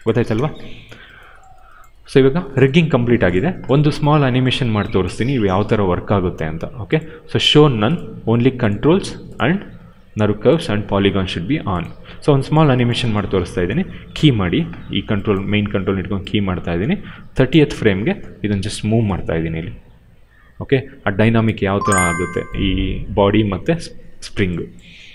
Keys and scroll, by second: 0.0 0, 0.1 Return, 13.9 s, 15.8 s, 17.5 s, 18.4 w.